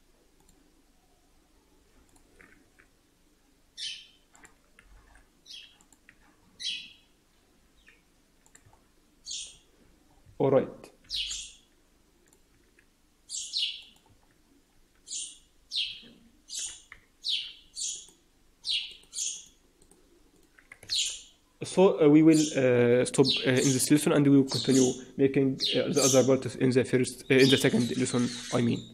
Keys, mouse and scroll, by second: 0.3 click, 2.6 s, 4.7 g, 6.0 s, 8.6 Tab, 9.4-10.0 scroll down 4, 10.0-10.5 scroll up 5, 10.2 Tab, 11.0 g, 12.4 s, 14.0 Tab, 14.2-14.6 scroll down 3, 14.5-15.8 scroll up 4, 14.6 Tab, 16.6-17.1 scroll down 2, 17.1 Tab, 17.1-17.8 scroll down 4, 17.8 right click, 17.8-18.8 scroll down 1, 18.8 right click, 19.7 right click, 20.9 ctrl+s, 21.7-22.2 scroll down 4, 22.1-22.7 scroll up 4.